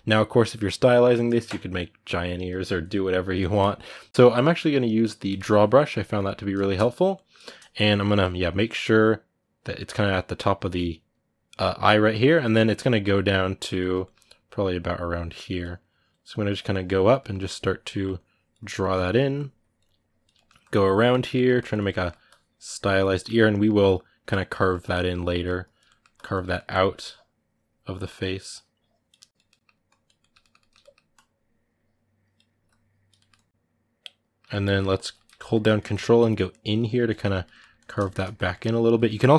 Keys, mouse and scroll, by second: 5.1 click, 5.6-14.3 ctrl+middle drag, 14.3-17.0 drag, 17.0 middle click, 17.2 click, 17.7 middle click, 17.9 click, 18.8 middle click, 19.1-20.1 drag, 20.1 ctrl+middle click, 20.4 click, 21.1 ctrl+middle click, 21.3 click, 21.5 ctrl+middle click, 22.0 click, 22.9-24.7 middle drag, 24.7 click, 25.1 middle click, 25.4 click, 25.6 ctrl+middle click, 25.9 click, 26.2 ctrl+middle click, 26.5-29.0 drag, 29.0 middle click, 29.6 click, 30.0 ctrl+middle click, 30.9-32.9 drag, 32.9 ctrl+middle click, 33.1 click, 33.5-34.7 middle drag, 34.7 ctrl+click, 34.9 ctrl+middle click, 35.4 ctrl+click, 35.6 middle click, 35.9-37.2 ctrl+drag, 37.2 middle click, 37.5 ctrl+click, 37.8 shift+middle click, 38.1 ctrl+click, 38.3 middle click, 38.6 ctrl+click, 38.8 ctrl+middle click, 39.2-39.3 ctrl+drag.